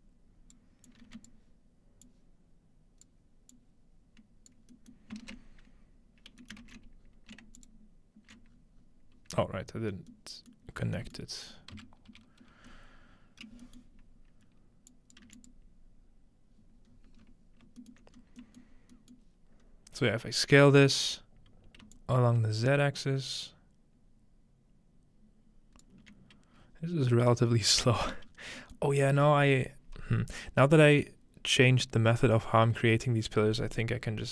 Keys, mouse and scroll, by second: 0.9 click, 1.1 a, 2.1-3.1 drag, 3.5-4.5 drag, 5.4 click, 6.6 ctrl+s, 6.6 middle click, 7.0-7.6 scroll down 1, 7.6 click, 10.1-10.5 scroll down 1, 10.7-12.1 middle drag, 10.7-12.7 scroll down 1, 11.9-12.6 typing, 12.7 scroll up 1, 13.1 scroll down 1, 13.6-14.9 middle drag, 14.9 click, 15.3 1, 15.4 click, 16.9-18.7 scroll up 1, 17.8-18.4 alt+middle drag, 18.7 alt+middle click, 18.7 scroll down 1, 19.2-21.1 middle drag, 19.7 scroll up 1, 21.9-25.9 shift+drag, 27.3-28.3 scroll up 2, 27.3 shift+middle click, 28.0-28.7 middle drag, 28.3 scroll down 1, 28.8-30.4 middle drag, 29.0 scroll up 1, 29.5 scroll down 1, 33.4-34.2 scroll down 3, 34.2 middle click.